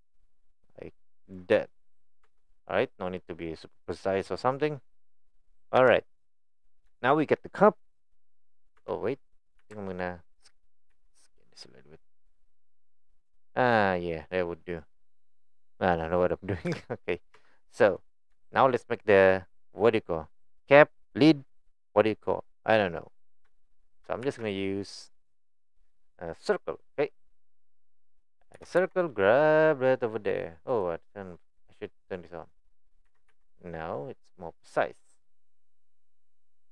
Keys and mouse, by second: 1.6 click, 2.2 Tab, 2.8-3.4 middle drag, 3.9-4.2 middle drag, 4.8-5.1 middle drag, 5.8 KP_1, 7.1 shift+middle click, 8.8 Tab, 9.6 2, 10.0 alt+click, 10.9 s, 13.4 click, 14.0-16.0 middle drag, 16.7 KP_4, 16.7 KP_1, 17.4 Tab, 18.1 click, 18.6 shift+middle click, 23.6 shift+middle click, 28.6 g, 32.1 click, 32.5 click, 33.0 g.